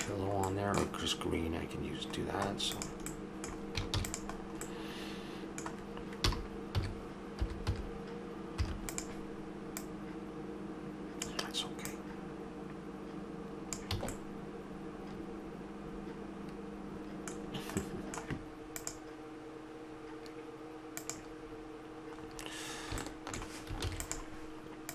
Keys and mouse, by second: 2.8-6.2 drag, 3.9 shift+d, 6.2 r, 9.8-13.8 drag, 13.9 a, 17.4-18.9 middle drag, 23.8 ctrl+s.